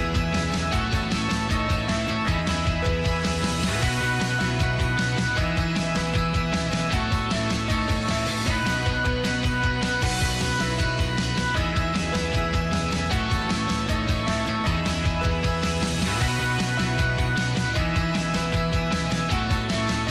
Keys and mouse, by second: 0.0 shift+middle click, 0.7 Tab, 1.7 middle click, 2.0 middle click, 3.6 ctrl+s, 4.9 Tab, 5.6 middle click, 7.7 alt+h, 8.3 middle click, 9.2 middle click, 10.4 shift+middle click, 11.3 2, 11.7 click, 13.0-16.2 typing, 13.6 click, 15.7 middle click, 17.3 ctrl+r.